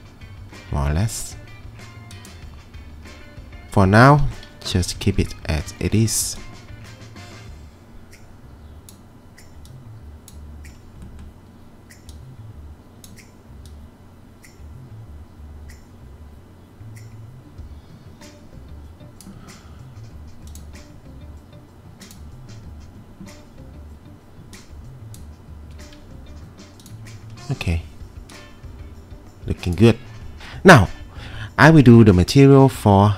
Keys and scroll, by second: 4.8-6.2 typing.